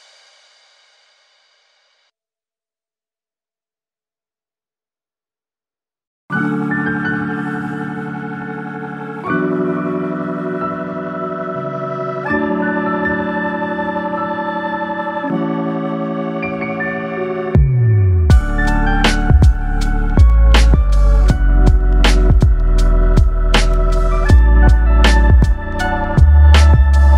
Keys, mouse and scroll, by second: 1.3 click, 2.2 g, 3.3 click, 3.5 g, 6.0 2, 6.2 click, 6.7 e, 14.4 click, 20.5 click, 20.8 click, 21.9 g, 23.3 click, 24.1 g, 25.2 click, 25.4 g, 26.5 click, 26.7 g.